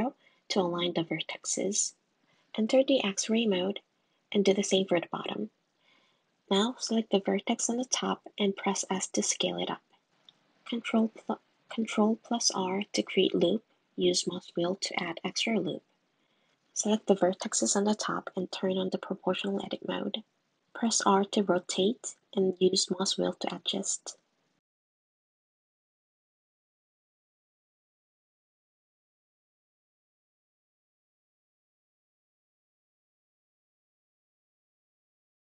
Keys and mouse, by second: 2.1 click, 2.1 middle click, 2.7 click, 3.5 s, 5.3 click, 5.9 click, 6.5 s, 7.4 g, 9.9 super+r, 13.2 click, 13.5 click, 13.7 click, 14.0 click, 14.3 middle click, 14.7 click, 15.6 click, 15.7 click, 17.9 click, 18.2-19.4 drag, 20.2 r, 25.1 r, 34.3 click, 35.4 Tab.